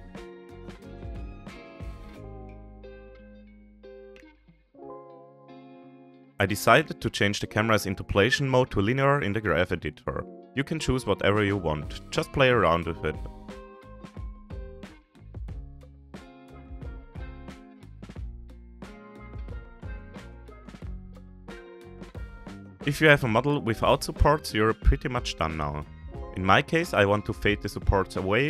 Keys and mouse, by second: 0.9-2.7 middle drag, 3.2 ctrl+s, 5.2 ctrl+s, 5.9 ctrl+s, 6.9 a, 9.5 drag, 9.5 a, 10.6 ctrl+a, 19.5 click, 21.3 click.